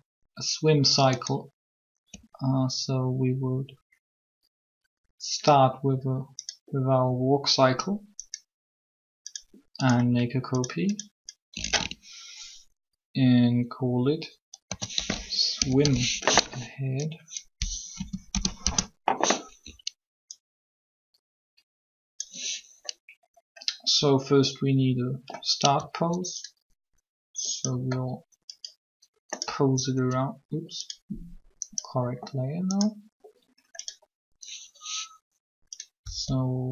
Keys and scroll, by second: 14.4-15.6 typing, 17.9 BackSpace, 18.0 BackSpace, 18.3 Return, 36.0 r.